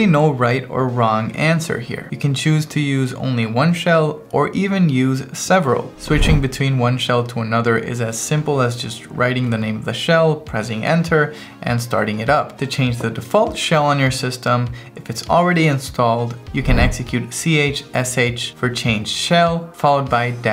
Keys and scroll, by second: 6.3 Return, 7.9-9.0 typing, 9.5 Return, 10.9-11.8 typing, 12.4 Return, 16.9 Return, 17.7-20.5 typing.